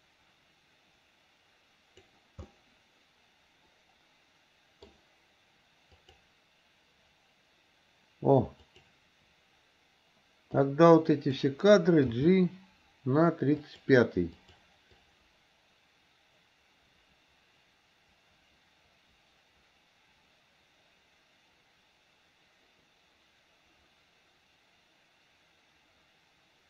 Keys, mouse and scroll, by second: 2.6-4.9 middle drag, 6.1 click, 8.7 click, 10.6 click, 12.1 g, 14.5 click, 15.1-26.6 drag.